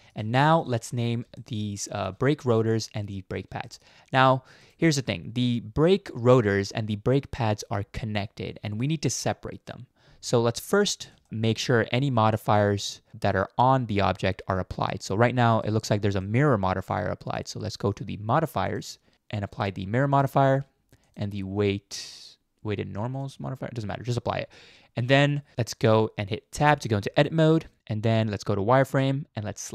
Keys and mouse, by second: 0.3 shift+middle drag, 1.3-2.1 shift+middle drag, 3.6 shift+middle click, 14.9-15.6 middle drag, 16.2-17.4 middle drag, 17.7 middle click, 19.1 ctrl+z, 19.5-20.3 drag, 21.1-23.3 drag, 25.3 middle click, 26.6 Tab, 28.5 z, 29.6 middle click.